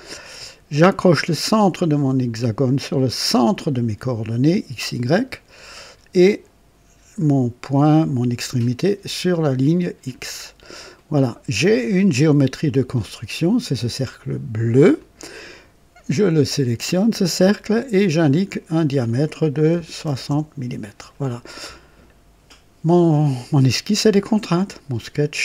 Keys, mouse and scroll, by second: 3.3 click, 10.0 click, 10.9 right click, 14.9 click, 17.8 click, 19.7 KP_6, 20.0 KP_0, 20.2 Return.